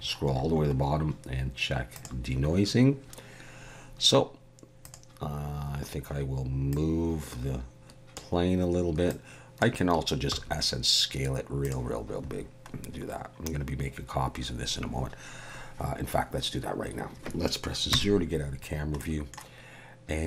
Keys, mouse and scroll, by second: 1.9 click, 4.8 click, 6.7 click, 9.1 click, 10.3 s, 12.8-13.3 scroll down 1, 17.9 KP_0, 18.7-19.0 scroll down 2, 19.0 middle click.